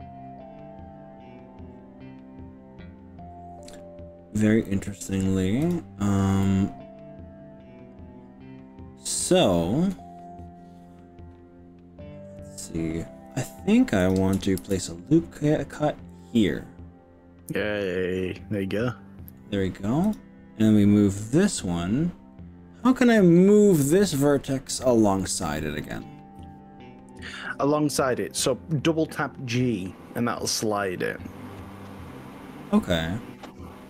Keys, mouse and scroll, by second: 5.0 click, 5.8 click, 6.4-12.8 middle drag, 13.4 click, 14.0 click, 14.6 ctrl+r, 17.9 click, 18.3-19.4 middle drag, 20.1 click, 24.5 scroll up 3, 25.3 middle click, 30.5 g, 30.6 g.